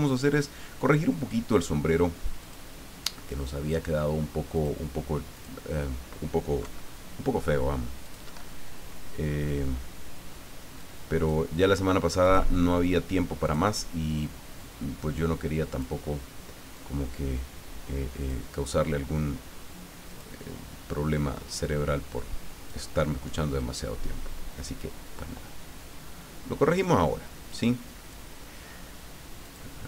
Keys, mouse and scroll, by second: 2.4 click, 4.5 click, 5.3 click, 6.6 Delete, 8.0 click, 8.3 Delete, 10.8 click, 12.2 click, 13.4 click, 14.5-16.2 drag, 16.7-18.8 drag, 20.1 click, 21.6-22.8 drag, 23.6-27.1 drag, 27.5-28.7 drag, 29.4 click.